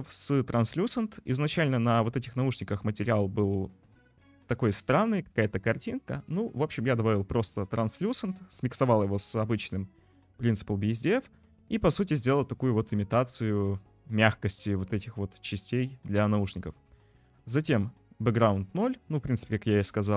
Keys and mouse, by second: 1.3 click, 1.8 shift+drag, 2.7 click, 3.9 click, 4.4 click, 5.2 click, 6.3 click, 8.3 click, 8.7 click, 9.3 click, 11.0 click, 18.3 click, 20.0 click.